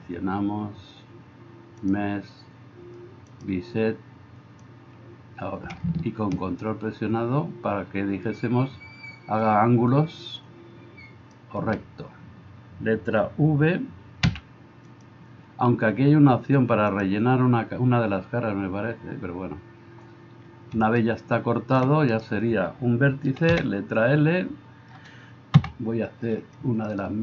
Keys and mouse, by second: 14.3 v, 15.1-17.0 middle drag, 17.0-27.2 drag, 22.1-23.5 middle drag, 22.1-23.5 right drag, 23.5 l, 25.6 KP_Divide.